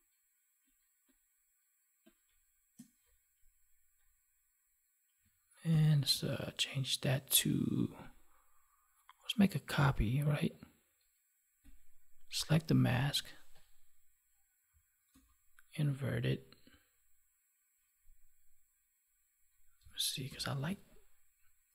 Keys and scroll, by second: 5.6 ctrl+j, 15.0 ctrl+i, 20.2 ctrl+i.